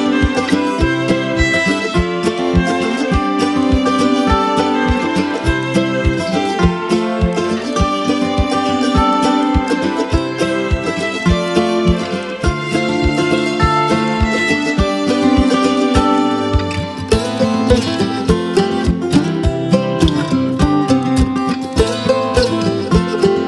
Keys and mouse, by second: 2.1-3.6 drag, 4.8 space, 5.1 click, 5.3 space, 6.1 [, 7.0-8.0 drag, 9.0 space, 9.1 click, 9.5-10.8 space, 9.8 click, 10.9 space, 11.1 click, 11.4 space, 11.9-13.7 click, 13.0 space, 13.0 click, 13.5 space, 13.8-15.0 drag, 15.2-15.8 space, 15.8 click, 16.0 space, 16.4-17.0 click, 17.0 space, 17.0-18.8 click, 17.5 space, 17.6 click, 18.8 space, 18.9-19.6 click, 19.3 space, 20.0 click, 21.3 space, 21.4-22.0 click, 21.8 space, 22.1 click.